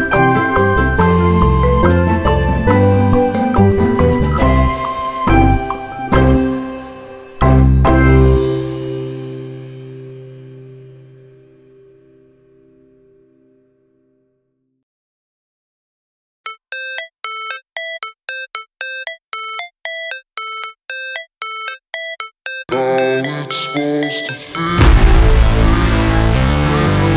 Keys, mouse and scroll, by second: 0.1 click, 0.8 KP_1, 2.5 KP_1, 3.4 KP_3, 5.8 click, 7.2-8.2 drag, 9.5-10.6 drag, 10.9-11.5 scroll down 1, 11.5-12.3 scroll down 1, 12.3 scroll up 2, 13.2 ctrl+z, 16.3 ctrl+b, 22.3-23.0 shift+scroll up 1, 23.4 shift+click, 24.6 Tab, 26.6-27.1 scroll down 1.